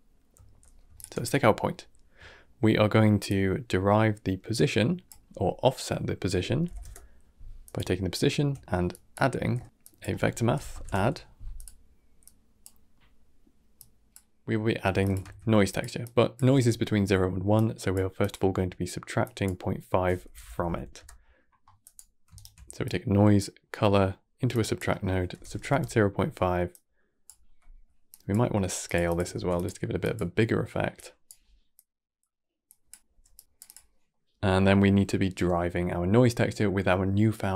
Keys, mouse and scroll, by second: 0.8 alt+shift+click, 1.8-2.1 scroll down 1, 2.1 shift+middle click, 2.5-3.1 scroll up 1, 3.1 click, 9.7 click, 12.1 click, 12.8 middle click, 13.6 click, 14.2 middle click, 14.9 click, 15.1 shift+d, 15.9 click, 17.4 click, 18.1-19.2 drag, 22.2 ctrl+Right, 22.7 click, 24.4-26.6 drag, 27.3 middle click, 28.0 click, 28.9 click, 29.2 shift+d, 29.9-31.7 drag, 32.5 click, 33.0 g, 33.5 click, 34.0-37.1 middle drag.